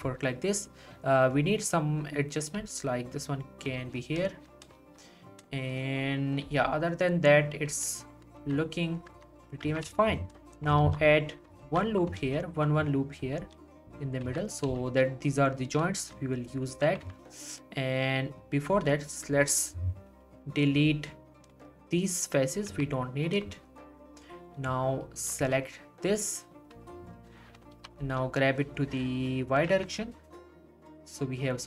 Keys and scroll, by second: 2.6 g, 6.4 g, 8.4 z, 9.1 Tab, 9.9 z, 10.8 ctrl+r, 11.6 ctrl+r, 12.2 ctrl+r, 13.4 ctrl+r, 14.2 z, 17.0 z, 22.7 x, 27.8 g, 28.0 y, 29.8 Tab.